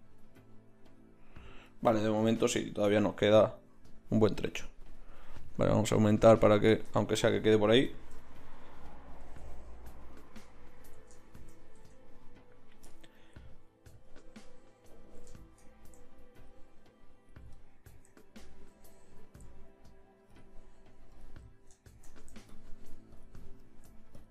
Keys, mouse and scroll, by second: 4.3-7.2 drag, 9.2 z, 9.7-11.7 drag, 10.7 z, 11.7 Tab, 21.5-24.3 drag.